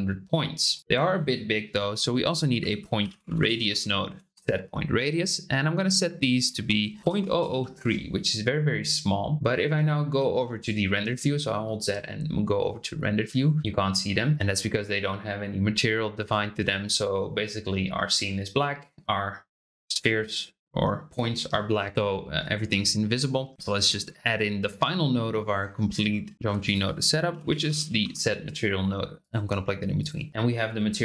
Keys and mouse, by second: 0.8 BackSpace, 6.5-8.1 drag, 7.2 KP_0, 10.1 z, 13.5-20.2 middle drag, 23.3 shift+click, 24.4-25.6 drag, 26.3 shift+a, 29.9-31.0 drag.